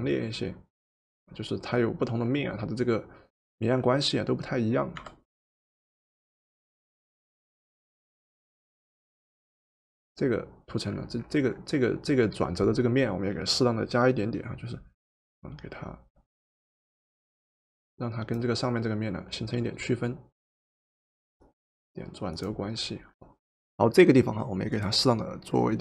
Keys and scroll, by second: 5.0 v.